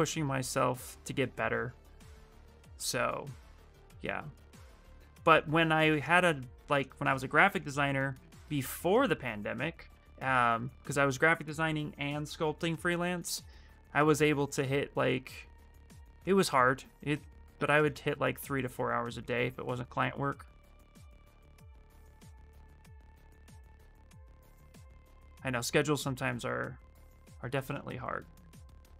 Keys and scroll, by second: 26.9 space, 27.8 shift+f.